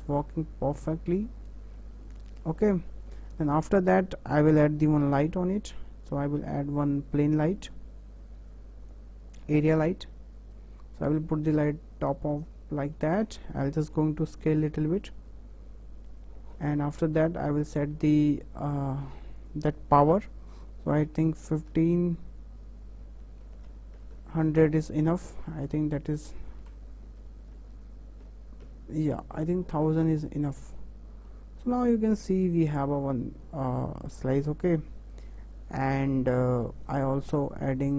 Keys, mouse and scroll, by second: 1.5 scroll up 1, 1.5-3.2 shift+middle drag, 3.2 scroll up 2, 3.5-4.2 shift+middle drag, 4.2-5.2 scroll down 3, 5.2 shift+a, 10.5 click, 12.8-13.1 scroll up 1, 13.1-14.2 shift+middle drag, 14.2 s, 17.8 click, 19.5-24.5 drag, 24.5 KP_0, 26.2-27.8 drag, 27.8 KP_0, 30.5-30.8 scroll up 4, 30.8-31.8 middle drag, 31.8 KP_0, 36.9 KP_0, 37.5 scroll down 3, 37.8 middle click.